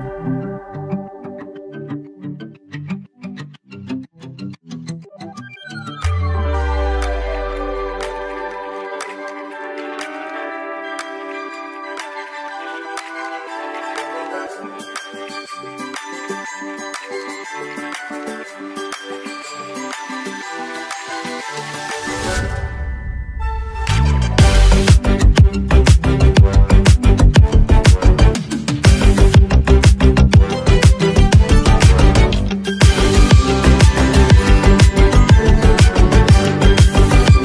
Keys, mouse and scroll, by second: 0.7 space, 0.9 click, 2.0 space, 2.1 click, 2.4 space, 3.4 click, 4.6 space, 5.0 click, 5.1 space, 7.0 click, 7.0 click, 7.8 space, 8.0-10.6 drag, 10.6 space, 12.1 space, 12.2 click, 13.2 space, 13.3-15.6 drag, 15.6 space, 17.3 space, 17.9-21.1 drag, 21.1 space, 21.6 click, 22.1 space, 22.8 click, 22.9 space, 23.3 space, 24.4 click, 25.6 space, 25.6 click, 27.1 space, 27.3 click, 27.6 space, 28.2 click, 28.3 space, 30.9 click, 32.9-33.3 alt+scroll down 1, 34.6 ctrl+s.